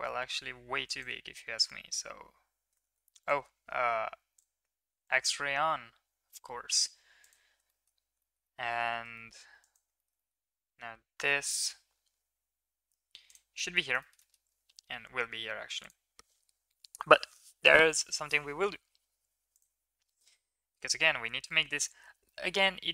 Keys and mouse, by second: 0.6 1, 1.0 click, 1.3 g, 5.1 click, 5.6 g, 7.6 shift+middle click, 8.3 shift+middle click, 8.5 middle click, 9.3 shift+middle click, 9.6 middle click, 10.0 shift+middle click, 10.2 middle click, 10.9 g, 13.6 middle click, 14.1 shift+middle click, 19.5 click, 20.4-20.8 middle drag, 21.2 middle click, 21.9 middle click, 22.4 middle click.